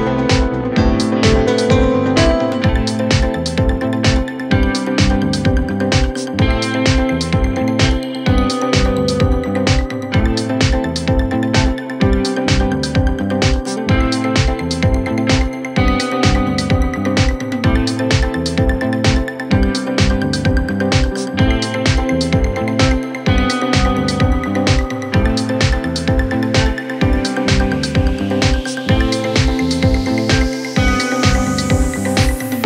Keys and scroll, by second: 7.8 F3, 11.4 c, 17.2 c, 17.8 shift+F2.